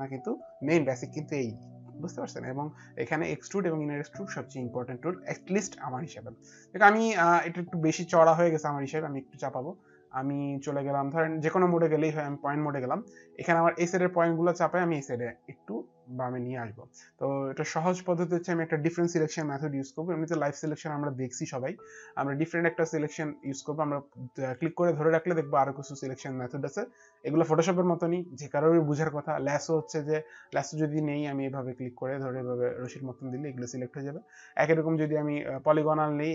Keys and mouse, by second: 7.2 alt+click, 11.8 click, 20.3 click, 24.5 click, 30.9 click, 35.1 click, 36.0 click.